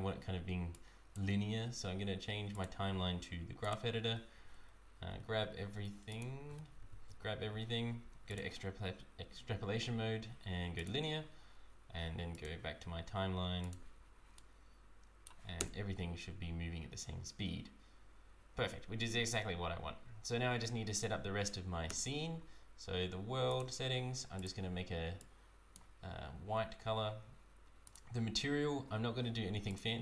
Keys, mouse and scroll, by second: 0.7 click, 3.7 click, 4.6-5.0 scroll down 1, 5.0 a, 5.5 a, 6.1 shift+click, 6.7 a, 8.3 click, 12.4 click, 13.7 click, 14.4 right click, 15.6 space, 21.9 space, 23.5 click, 27.9-30.0 click.